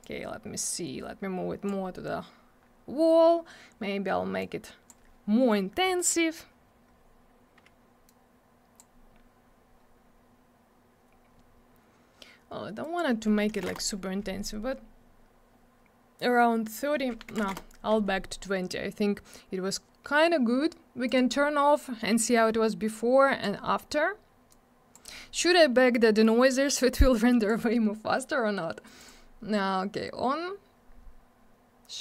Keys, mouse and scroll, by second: 0.0 click, 2.6 scroll up 1, 4.3 click, 8.0 click, 10.0 scroll up 1, 10.8 scroll down 1, 12.8 click, 12.9 click, 13.4 3, 13.6 Return, 17.3 2, 17.4 Return, 18.9 scroll up 1, 19.8 scroll down 1, 21.0 click, 21.1 click, 22.9 click, 24.5 click, 27.1 click, 28.9 click, 29.0 click, 31.2 scroll up 1.